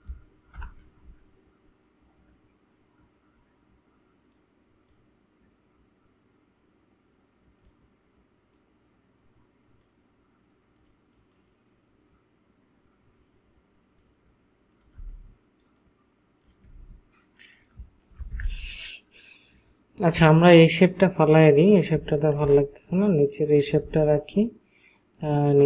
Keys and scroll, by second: 0.6 Return, 15.0 ctrl+space, 22.5 ctrl+space.